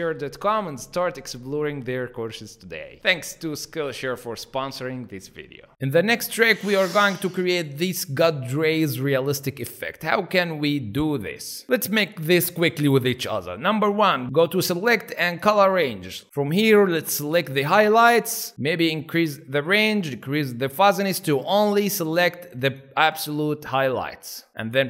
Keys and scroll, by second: 11.6 alt+space, 12.4 alt+space.